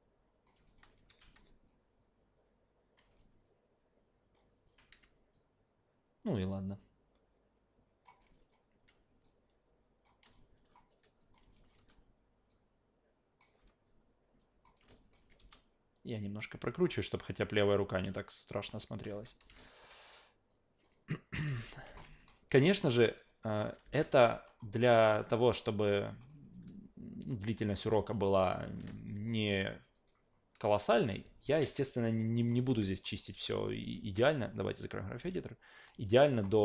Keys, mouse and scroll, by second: 0.7 alt+click, 1.0 s, 1.2 s, 1.7 drag, 2.1 click, 2.5 click, 3.2-4.3 alt+drag, 5.3-8.0 drag, 8.3 alt+drag, 9.2-10.0 drag, 10.3-10.7 alt+drag, 11.2 click, 11.5 alt+drag, 11.8 w, 12.5 click, 13.6 s, 14.4 click, 14.9 alt+click, 15.4 e, 16.1-16.8 drag, 17.0 alt+drag, 18.1 click, 18.7-19.1 alt+drag, 19.2 s, 19.4 s, 19.6 alt+drag, 20.5-20.8 drag, 20.9-21.3 drag, 21.5 alt+v, 21.9 alt+v, 22.6 click, 23.0 alt+right click, 23.2-23.5 alt+drag, 23.8 f, 24.1 alt+right click, 24.4 alt+drag, 24.8 alt+middle click, 25.1 alt+right click, 25.5 alt+middle click, 25.8 alt+right click, 26.2 alt+middle click, 26.5 alt+click, 27.5 alt+middle drag, 27.8 e, 28.1 click, 28.9 alt+right click, 29.1-29.8 alt+drag, 29.9 alt+right click, 30.2 alt+middle drag, 31.0 a, 32.3 click, 32.8 alt+right click, 33.1 alt+middle click, 33.3 alt+v, 33.9 alt+v, 34.5 click, 34.9 click, 35.2 alt+v, 36.4 alt+middle click.